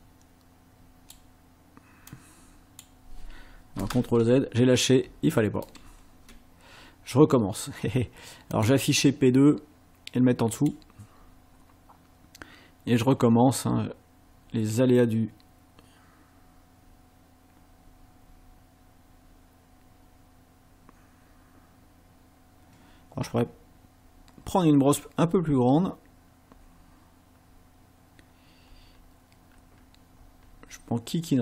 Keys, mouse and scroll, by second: 2.1 click, 4.1 ctrl+z, 5.8 ctrl+z, 8.5 click, 10.5 click, 13.0-31.4 drag.